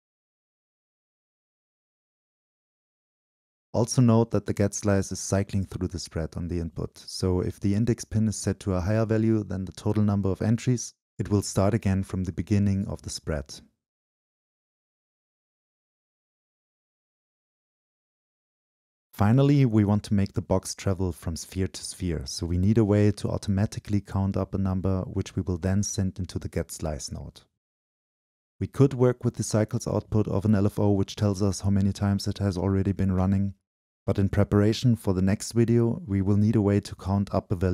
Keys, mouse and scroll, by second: 0.0-2.6 drag, 2.7 click, 2.8 right click, 2.9 click, 3.0 right click, 3.2-3.6 scroll up 2, 3.6 right click, 4.0 click, 4.1-4.5 right drag, 4.6-6.2 shift+drag, 6.2-7.7 middle drag, 7.7-11.9 drag, 11.9 middle click, 13.4-15.7 drag, 15.7 middle click, 16.4-17.4 drag, 18.0-22.9 drag, 22.9 Down, 22.9-25.0 middle drag, 25.3-28.8 middle drag, 27.1 ↖, 27.1 Up, 28.7 Down, 28.8-32.9 drag, 28.8-30.3 scroll down 2, 30.3-30.7 scroll up 2, 33.4-35.4 drag, 33.4-35.4 scroll up 2, 35.8 click.